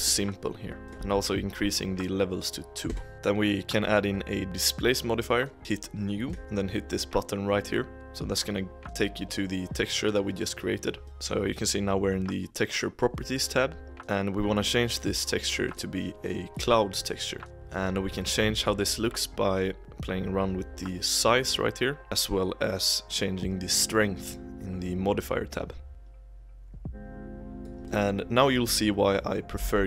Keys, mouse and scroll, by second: 0.0 click, 0.8-2.9 drag, 3.1 click, 5.6-6.2 scroll down 1, 6.2-8.1 drag, 11.0-11.9 drag, 15.6-17.5 drag, 17.5-19.8 middle drag, 19.8-22.0 drag, 23.0 click, 25.9-27.8 drag, 27.8-29.5 middle drag, 29.5 s.